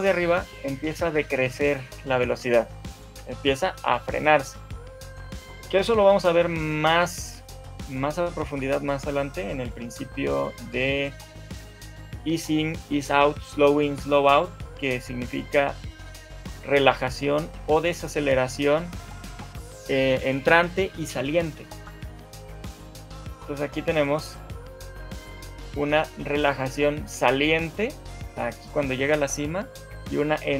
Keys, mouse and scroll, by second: 2.8 shift+middle click, 5.6 right click, 23.2 right click.